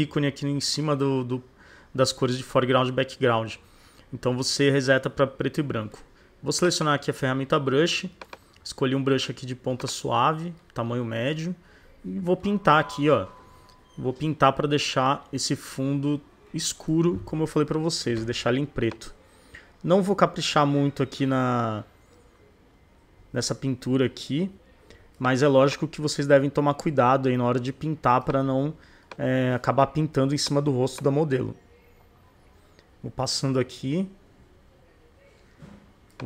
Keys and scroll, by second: 17.7 [.